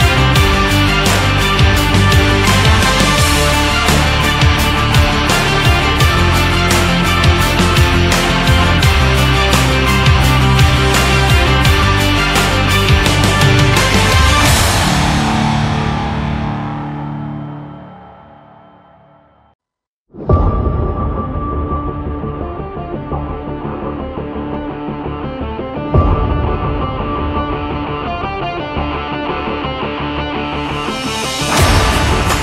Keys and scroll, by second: 4.7 shift+Down, 5.3 Up, 23.2 shift+Right, 25.0 Up, 26.9 Right, 28.6 Down, 29.3 Left, 30.7 Down, 32.0 Left.